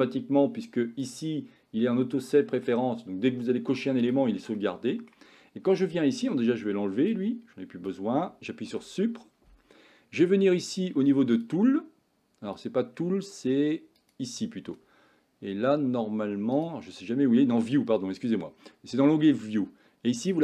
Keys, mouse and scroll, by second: 4.6-5.1 middle drag, 7.2 click, 8.7 Delete, 12.6 click, 14.0 click, 16.6 click, 20.3 click.